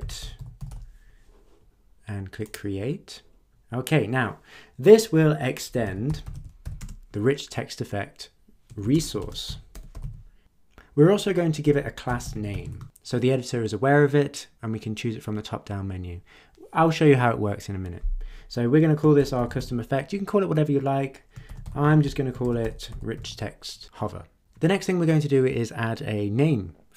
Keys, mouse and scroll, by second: 0.0-1.2 typing, 2.5 click, 5.5-7.1 typing, 8.6-10.5 typing, 11.6 Return, 11.8-13.0 typing, 18.9-20.0 typing, 21.2-23.7 typing.